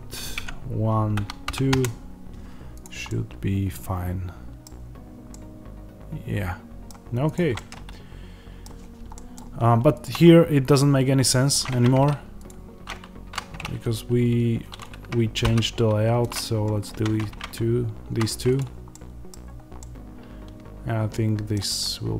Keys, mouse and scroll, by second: 1.7 KP_Enter, 3.0-9.9 middle drag, 4.5-5.2 scroll down 1, 9.9 click, 10.2-10.6 scroll down 1, 10.6-12.3 middle drag, 10.6-11.1 scroll up 1, 11.6 Tab, 12.3 click, 13.2 z, 14.7 click, 16.2 x, 16.6 scroll down 2, 16.8 Tab, 18.1 z, 18.5 click, 18.8 middle click, 19.2-19.7 scroll down 2.